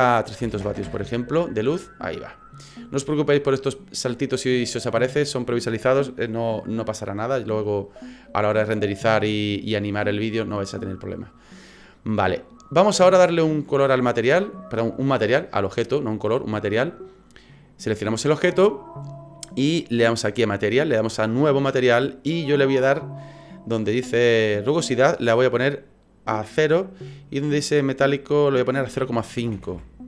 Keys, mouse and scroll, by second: 0.7 KP_0, 2.0 scroll down 2, 2.2-2.5 scroll up 1, 12.8 right click, 20.1 click, 21.2 click, 25.1 click, 27.2 click, 28.6 click.